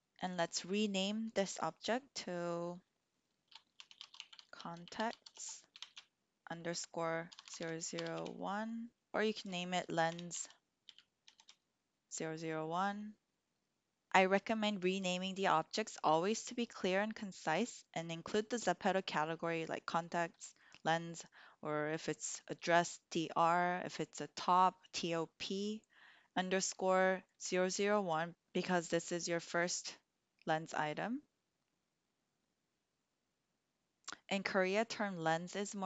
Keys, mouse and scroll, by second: 0.0 click, 3.3-35.8 drag, 7.4 0.